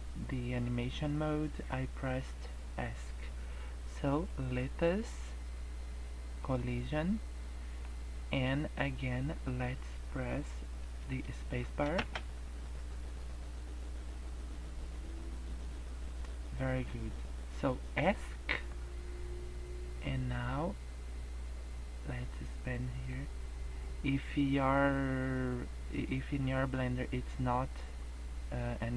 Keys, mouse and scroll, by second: 4.1 click, 6.3 click, 7.4 middle click, 11.9 space, 18.1 Escape, 20.3 click.